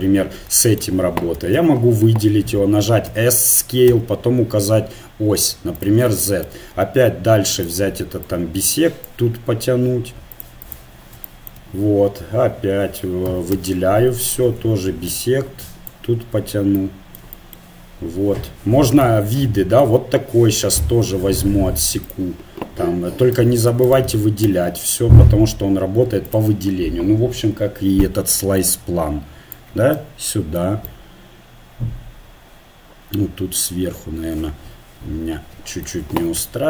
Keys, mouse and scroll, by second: 1.3 a, 1.6 a, 3.1 s, 7.5-9.6 drag, 10.4-12.6 drag, 13.3 a, 13.6 a, 14.5-15.9 drag, 22.1-24.1 drag, 24.1 a, 24.5 a, 26.3 click, 27.0-28.0 drag, 32.8 middle click, 34.2-36.6 middle drag, 36.2 a, 36.4 a.